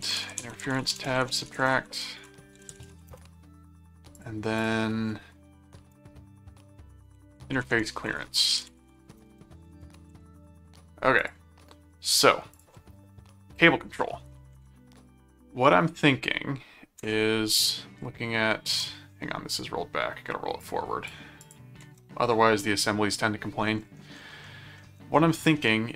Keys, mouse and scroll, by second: 0.0-3.6 typing, 4.2 click, 6.9-10.7 typing, 11.2 click, 12.5 click, 14.5 ctrl+Tab, 18.7 ctrl+Tab, 20.6 click, 21.4 ctrl+click, 21.8 ctrl+Tab, 24.4 middle click, 25.6 middle click.